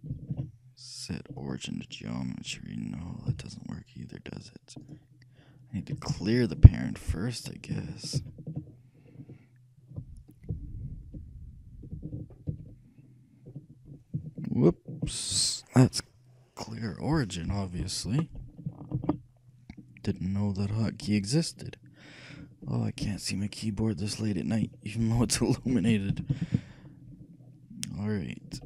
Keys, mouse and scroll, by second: 0.2 ctrl+alt+shift+c, 3.5 g, 8.3 ctrl+z, 12.6 alt+o, 19.1 ctrl+z, 23.1 alt+p.